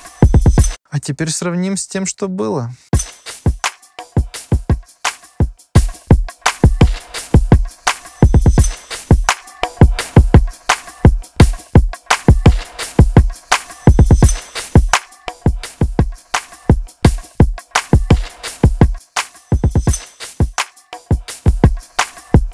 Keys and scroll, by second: 0.7 space, 2.9 space.